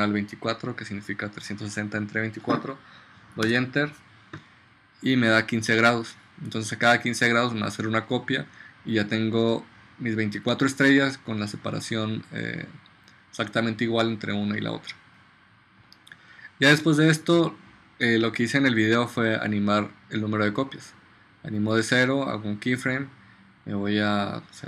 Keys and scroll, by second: 3.6 Return.